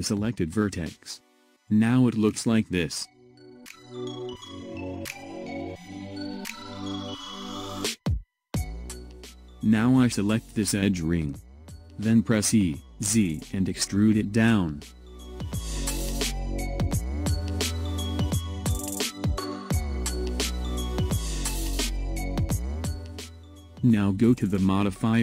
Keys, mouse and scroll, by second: 1.7-4.7 middle drag, 6.3 KP_1, 9.9 click, 11.3 e, 15.9 click, 17.1-17.4 ctrl+scroll down 1, 18.0-21.0 middle drag, 24.0 click.